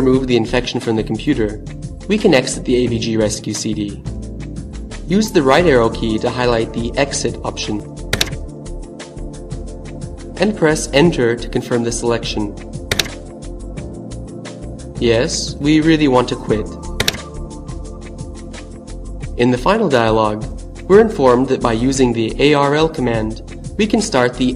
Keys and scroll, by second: 6.3 Right, 11.6 Return, 16.3 Return.